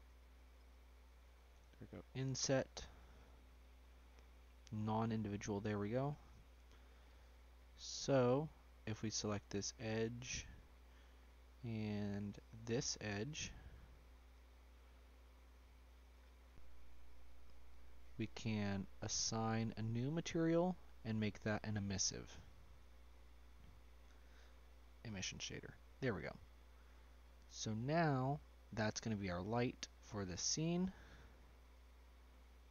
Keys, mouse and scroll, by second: 0.1 shift+click, 0.6 shift+click, 3.9 click, 5.6 middle click, 6.1-6.4 scroll up 3, 6.7 scroll down 1, 7.7 shift+middle click, 8.7 click, 10.3 scroll up 1, 10.6 middle click, 11.3 scroll up 2, 12.8 shift+click, 13.3 shift+click, 14.3 ctrl+click, 15.6 click, 17.2 shift+click, 17.6-20.1 scroll down 3, 20.1-22.9 drag, 25.1 click, 25.3-25.6 scroll down 2, 25.6-27.4 middle drag, 27.4 scroll down 1, 28.4 click, 28.8-30.5 drag, 31.3-32.7 middle drag.